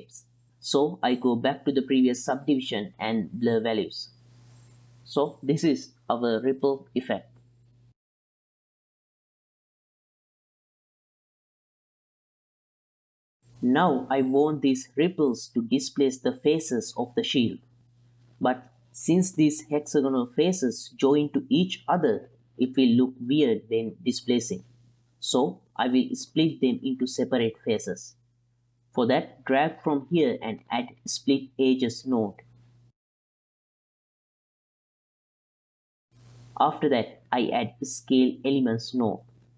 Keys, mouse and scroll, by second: 0.0 click, 0.3 ctrl+click, 1.1 click, 1.5 ctrl+click, 1.8 click, 2.4 ctrl+click, 3.0 click, 4.3 space, 7.6 space, 7.9-9.0 drag, 9.1 click, 9.8 click, 10.5 shift+p, 10.9 F2, 11.5 p, 12.2 n, 13.1 click, 13.7-16.0 middle drag, 17.5-17.9 middle drag, 18.7 middle drag, 20.0-20.4 middle drag, 21.2 x, 23.0 ctrl+click, 25.2-25.9 ctrl+drag, 26.8 ctrl+click, 27.2-28.1 drag, 29.4 click, 29.6-33.4 drag, 33.6 ctrl+shift+click, 33.8 click, 34.7 click, 35.0 click, 35.8-37.2 drag, 37.5 ctrl+middle click, 37.8 middle drag, 38.3 click, 38.4-38.9 drag, 39.2 ctrl+shift+click.